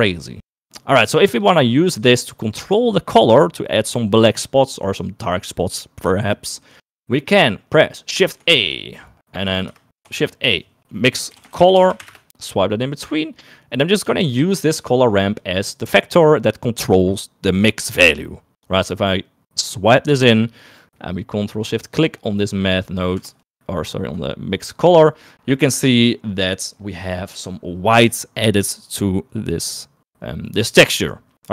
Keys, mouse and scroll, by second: 0.0 middle click, 0.9 click, 1.5 click, 2.1 click, 8.2 middle click, 8.4 shift+a, 10.3 shift+a, 15.5 click, 15.7-20.2 drag, 21.5 middle click, 22.1 click, 22.7 click, 23.7 ctrl+shift+click, 25.7 middle click, 30.7 middle click.